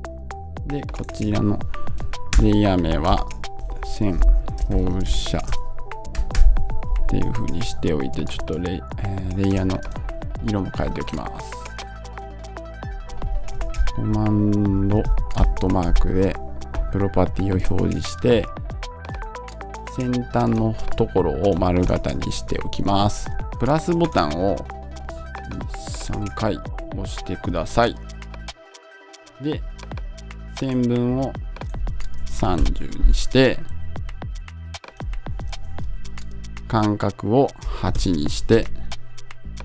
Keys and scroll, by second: 2.2 Return, 6.0 Return.